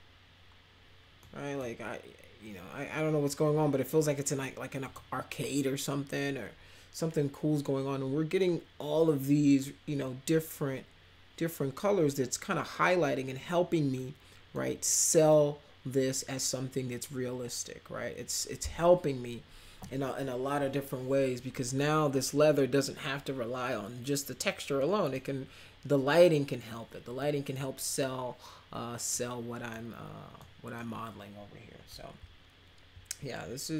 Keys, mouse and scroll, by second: 1.2-1.5 middle drag, 4.8 click, 14.0-14.5 middle drag, 14.8 middle click, 24.8 middle click, 26.2 middle click, 27.2 middle click, 29.1 middle click, 30.4 middle click.